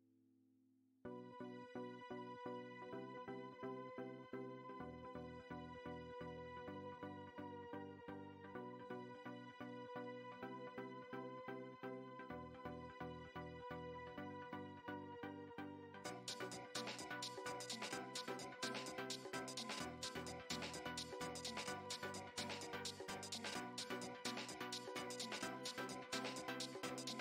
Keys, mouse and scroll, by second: 0.7 middle click, 1.5 2, 1.7 scroll up 3, 1.9 middle click, 2.4 click, 2.6 middle click, 3.4 middle click, 4.1 middle click, 4.8-5.9 shift+middle drag, 6.6 ctrl+b, 9.5-10.3 scroll down 1, 10.3 Tab, 10.9 shift+s, 11.8 shift+a, 12.0 scroll down 1, 12.6 s, 13.3 middle click, 13.9 click, 14.5-14.9 scroll up 12, 14.9-15.5 shift+middle drag, 15.5 shift+s, 15.6-16.0 shift+middle drag, 16.0 click, 16.6 scroll up 2, 17.1-17.4 scroll down 3, 17.4 x, 18.8 shift+a, 19.2-19.6 scroll up 2, 19.6-20.4 scroll down 2, 21.6-24.4 drag, 24.4-25.4 scroll up 2, 25.4 s, 26.7-27.1 scroll up 4, 27.1 Tab.